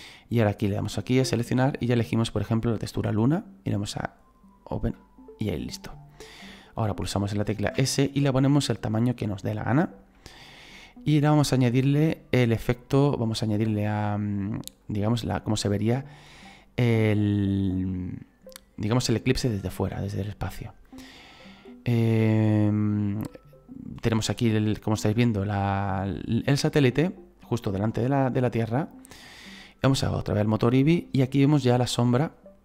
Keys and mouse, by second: 0.6 click, 2.7 click, 3.8 click, 9.5 click, 12.2 click, 13.2 middle click, 14.8 click, 17.6 click, 19.7 click, 21.4 middle click, 24.8 click, 26.4 middle click, 27.8 click, 30.5 click.